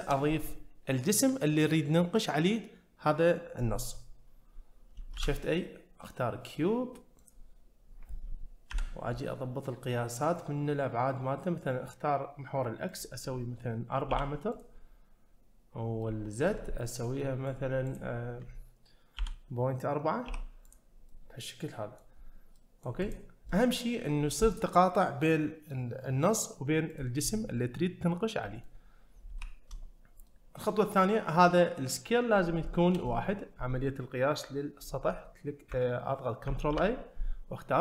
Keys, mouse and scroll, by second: 5.1 shift+a, 12.9-14.6 drag, 16.0 middle click, 16.7 scroll down 1, 17.2 middle click, 17.9-20.8 drag, 21.1-22.1 middle drag, 22.1-22.6 scroll up 1, 22.6 middle click, 23.0 click, 23.5-23.8 middle drag, 26.9 click, 28.4 middle click, 29.3 `, 30.3-30.6 middle drag, 32.6 shift+middle drag, 33.1 middle drag, 36.7 ctrl+a.